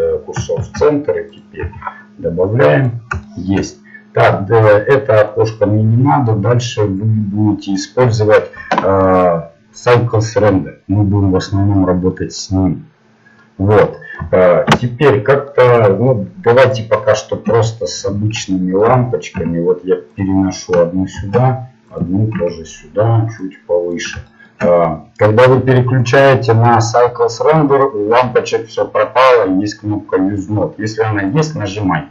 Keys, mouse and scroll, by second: 1.4 shift+a, 1.6 s, 3.3-4.3 middle drag, 5.4-6.8 drag, 6.5 middle click, 7.3-11.5 middle drag, 11.8-13.6 middle drag, 14.4-16.6 middle drag, 16.6 right click, 17.5 KP_7, 19.3 g, 21.2 shift+d, 22.4 KP_1, 23.4-25.1 drag, 26.3-32.1 drag.